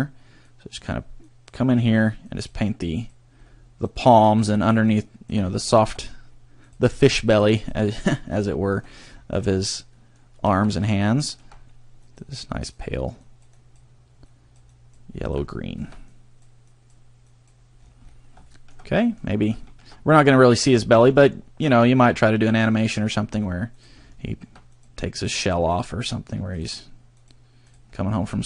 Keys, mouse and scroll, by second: 0.5 click, 1.3 click, 1.9 click, 2.3 click, 3.0 click, 3.5 scroll up 1, 3.8 click, 4.4 click, 4.6 scroll down 1, 4.9 click, 5.6 shift+middle click, 6.6 click, 7.2 click, 7.6 click, 8.3 scroll down 1, 8.4 shift+middle click, 8.8-9.4 scroll down 5, 9.5 shift+middle click, 9.9 shift+middle click, 10.4 shift+middle click, 10.7-11.0 scroll up 4, 11.2 shift+middle click, 11.5 scroll up 1, 12.0 click, 12.7 click, 13.2 click, 13.6 click, 14.2 click, 14.7 click, 15.3 click, 15.5 shift+middle click, 16.1 click, 16.7 click, 17.3 click, 17.8-18.3 scroll down 6, 18.4 shift+middle click, 18.8 middle click, 19.3-19.6 scroll up 2, 19.6 shift+middle click, 20.1 middle click, 20.8 shift+middle click, 22.7 click, 23.2-23.5 scroll up 2, 23.7 click, 24.2 shift+middle click, 24.7 click, 25.2 click, 25.7 click, 26.5 click, 27.2 click, 27.7 click, 27.9-28.4 scroll down 5.